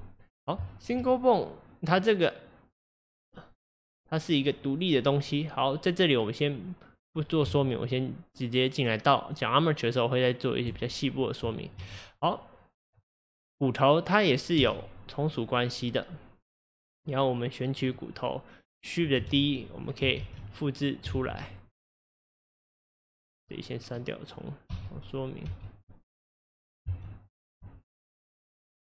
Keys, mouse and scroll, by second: 0.2 scroll down 1, 0.7-4.2 shift+middle drag, 5.0 scroll down 2, 7.5 Tab, 11.5 shift+middle click, 11.8 scroll up 1, 11.9-12.9 scroll down 3, 12.9 click, 13.4-14.7 scroll down 1, 14.7 e, 17.8 click, 19.2 shift+d, 20.3 shift+d, 21.2 shift+d, 22.2-23.5 drag, 24.7 x, 25.5 x, 26.4 click, 26.9 x, 27.7 x, 28.6 click.